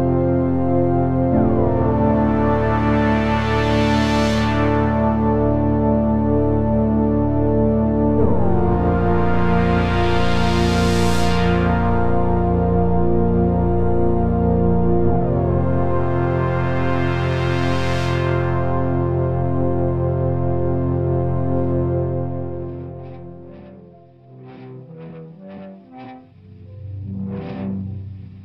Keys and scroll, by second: 3.0 f, 4.4 ctrl+z, 5.1 g, 8.1 ctrl+z.